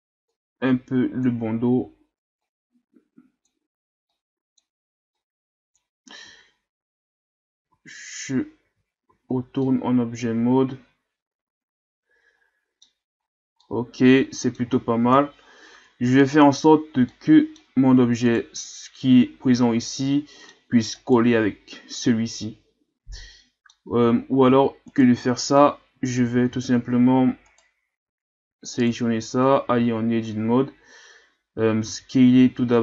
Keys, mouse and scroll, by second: 0.3-1.6 drag, 1.6-2.1 ctrl+scroll down 1, 2.4-6.2 drag, 6.2 a, 7.7 a, 8.6 Tab, 9.1 a, 9.3 scroll down 3, 9.6-12.6 middle drag, 13.2-13.6 scroll up 1, 13.6-15.1 middle drag, 15.1 KP_3, 16.1-16.9 ctrl+scroll up 1, 17.1-18.2 middle drag, 18.2 right click, 19.0-21.0 middle drag, 21.0 right click, 22.4-23.8 middle drag, 23.8 scroll up 1, 23.9 Tab, 24.5 Tab, 24.8 right click, 26.2 a, 26.5 a, 27.5 right click, 28.0 Tab, 28.5 Tab, 28.8 right click, 29.7 Tab, 31.9 s.